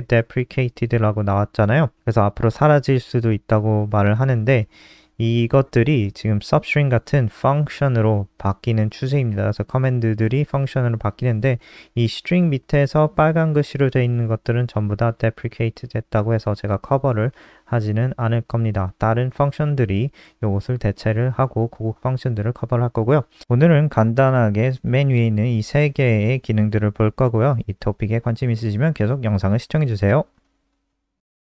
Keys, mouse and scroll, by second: 0.8-3.3 scroll down 1, 3.6 click, 3.8-4.1 scroll down 6, 4.6-5.2 scroll up 7, 5.6 click, 8.1 click, 10.4 scroll up 1, 11.2 scroll up 1, 13.5 scroll down 1, 16.3 click.